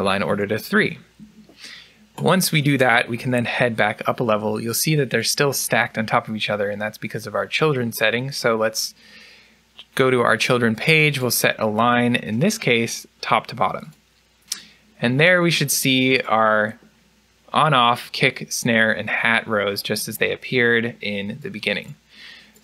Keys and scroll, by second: 0.2 3, 0.7 Return, 3.1 u.